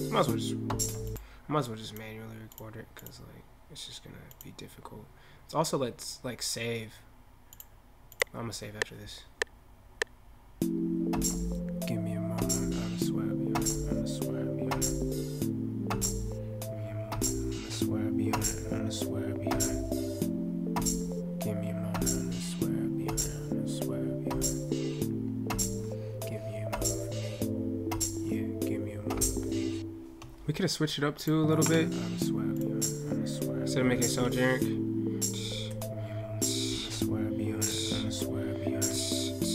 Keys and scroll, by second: 34.0 ctrl+F8.